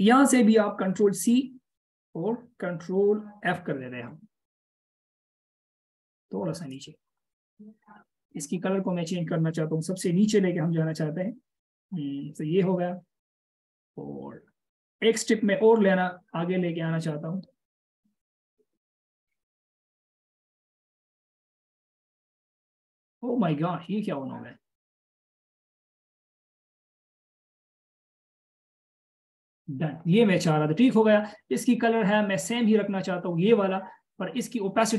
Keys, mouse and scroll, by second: 3.7 ctrl+f, 12.7 ctrl+shift+[, 16.3 ctrl+], 16.7 ctrl+], 17.1 ctrl+], 17.3 ctrl+], 17.7 ctrl+], 17.9 ctrl+], 18.1 ctrl+], 20.3 ctrl+p, 20.7 ctrl+p, 21.1 ctrl+p, 22.1 ctrl+[, 27.1 ctrl+shift+], 28.3 ctrl+[, 28.3 ctrl+shift+], 28.7 ctrl+[.